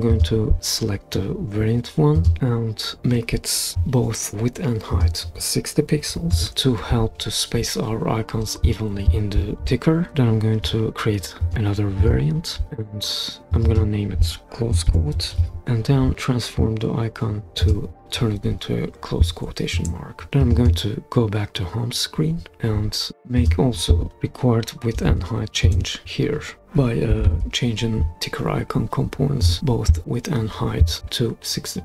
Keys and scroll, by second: 3.5-4.2 typing, 6.1 typing, 14.6-15.9 typing, 18.0 0, 19.7 Return, 24.7-25.6 typing, 25.6 Return, 26.9-27.8 typing.